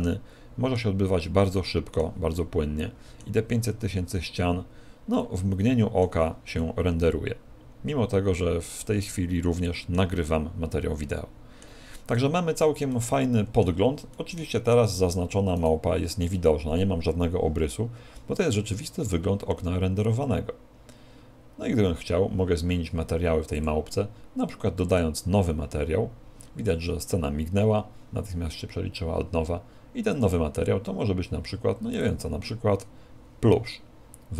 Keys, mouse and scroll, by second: 1.3 middle click, 3.8-4.4 scroll up 4, 5.3 middle click, 5.3-6.2 scroll up 3, 6.6 middle click, 10.2-11.0 scroll down 7, 11.0 middle click, 12.2 middle click, 13.0 middle click, 14.2 shift+middle click, 16.2 right click, 23.6 click, 24.9 click, 30.2 click.